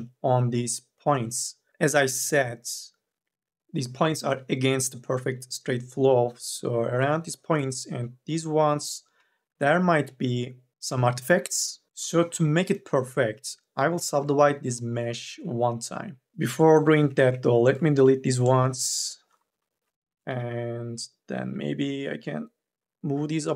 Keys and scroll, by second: 16.1 3, 17.0 1, 17.8 Delete, 19.3 Delete, 20.1 1, 21.1 m, 21.5 o.